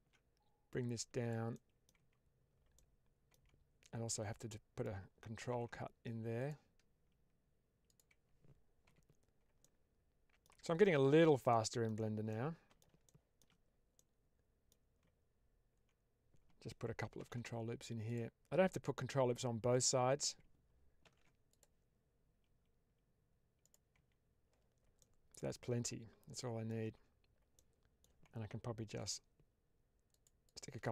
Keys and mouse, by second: 0.6 click, 1.2 typing, 1.4 middle click, 1.8 Tab, 2.6 middle click, 3.2 Tab, 4.4 middle click, 5.4 ctrl+r, 7.8 click, 8.7 Tab, 9.5-10.4 middle drag, 10.4 Tab, 11.4 middle click, 12.2 middle click, 13.0 shift+middle click, 13.9 middle click, 17.1 ctrl+r, 19.6 click, 20.9 ctrl+r, 23.5 click, 23.8 Tab, 24.9 middle click, 25.7-26.6 middle drag, 26.7 Tab, 27.4 middle click, 28.9 ctrl+r, 30.3 click, 30.8 Tab.